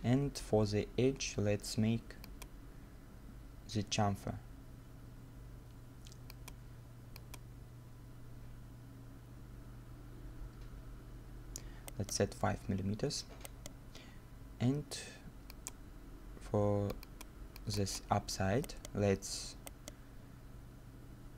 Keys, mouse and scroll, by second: 11.9 right click, 12.7-13.1 scroll down 1, 13.1 middle click, 13.4 right click, 14.1 scroll up 1, 18.7 right click, 19.1-19.7 scroll down 1, 19.7 right click.